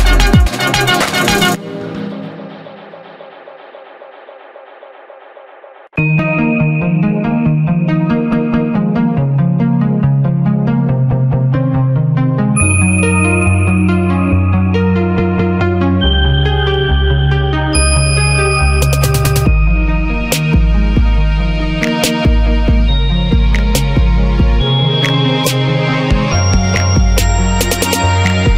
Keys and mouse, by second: 1.0 middle click, 1.1 alt+s, 1.9-3.2 middle drag, 3.8 click, 4.3 s, 5.0 a, 7.4 h, 7.8 Tab, 8.5-9.8 drag, 10.2-12.4 drag, 12.4 q, 13.9 Tab, 14.4 middle click, 14.5 a, 15.1 middle click, 16.4-17.7 middle drag, 18.2 middle click, 19.1 middle click, 19.2 s, 19.6 middle click, 19.9 s, 20.3 middle click, 20.8 s, 21.3 middle click, 25.2 g, 25.8-26.9 middle drag, 27.1 a.